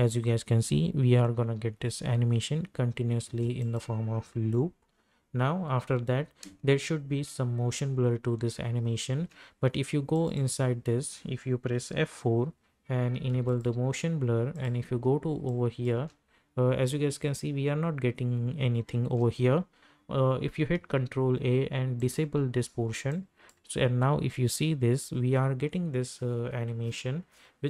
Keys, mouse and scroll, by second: 3.3 space, 3.6 click, 4.4 u, 6.4 space, 10.1 click, 12.2 F4, 13.3 ctrl+a, 13.5 ctrl+click, 15.9 space, 19.0 space, 20.7 ctrl+a, 22.0 click, 23.5 space.